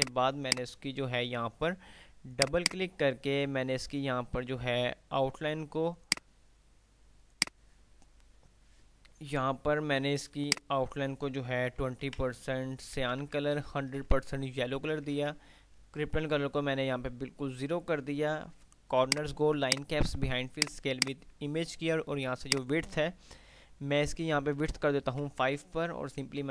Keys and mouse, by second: 0.4 F2, 0.8 click, 1.1 F2, 2.4 click, 6.3 click, 10.6-11.3 drag, 13.1 Tab, 19.3-23.1 drag.